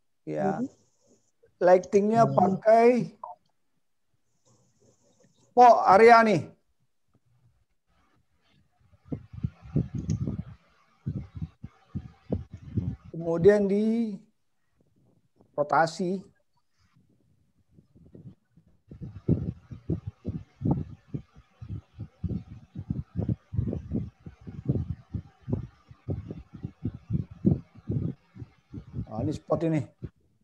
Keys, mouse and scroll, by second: 10.5 click, 11.8 click, 16.3 click, 18.3 click, 21.9 click, 24.0 middle click, 26.8 click, 27.6 click, 29.0 click, 30.2 click.